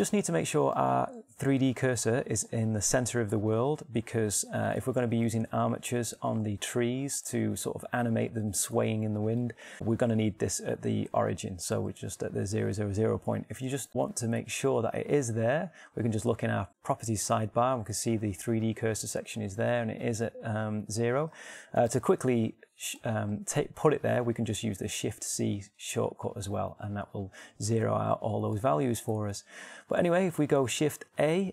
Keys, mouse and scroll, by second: 0.7-6.0 middle drag, 6.3 middle click, 13.9 n, 23.2 n.